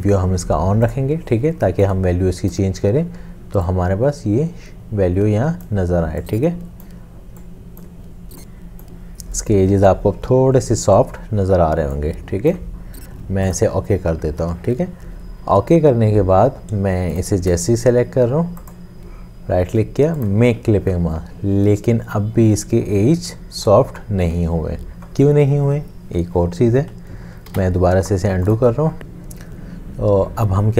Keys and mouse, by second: 27.5 ctrl+z.